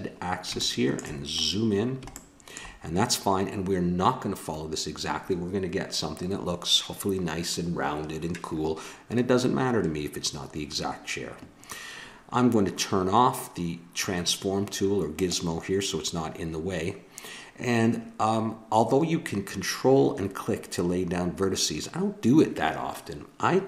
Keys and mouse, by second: 15.1-20.1 drag.